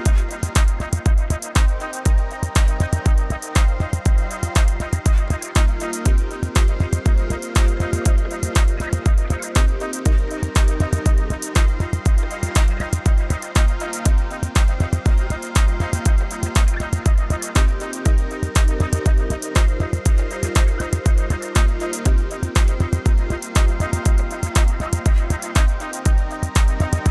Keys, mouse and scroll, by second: 1.3 Escape, 1.4 click, 1.7 t, 1.8 click, 2.3 Return, 2.6 Right, 3.0 click, 4.1 Up, 5.3 click, 6.0 Up, 6.3 ctrl+z, 6.7 click, 7.0 Up, 7.6 click, 7.6 Down, 8.7 click, 9.8 typing, 11.4 click, 14.6 right click, 15.3 Tab, 21.0 F9, 21.3 scroll down 1, 22.4-23.9 typing, 24.7 click, 25.1-25.9 typing, 26.0 click.